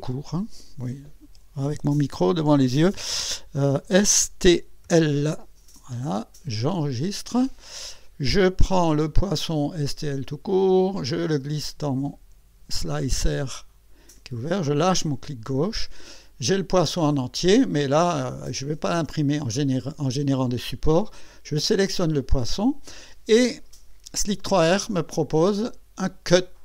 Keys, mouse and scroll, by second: 0.0 BackSpace, 1.2 n, 1.7 KP_Decimal, 3.9 s, 4.8 l, 6.6 click, 8.8 click, 10.3-14.9 drag, 16.6 scroll up 1, 21.4 click.